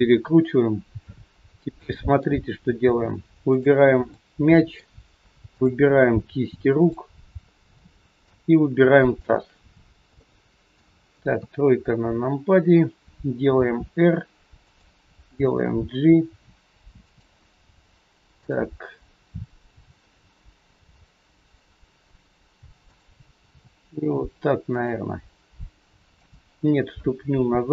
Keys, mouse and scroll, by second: 1.3 scroll up 2, 1.7 shift+middle click, 2.4 scroll up 2, 3.5 click, 4.1 middle click, 5.7 shift+click, 7.8 middle click, 9.1 shift+click, 9.7 scroll down 2, 10.2 middle click, 11.3 KP_3, 12.0-12.4 scroll down 1, 13.6 r, 15.2 g, 18.3 click, 19.7 g.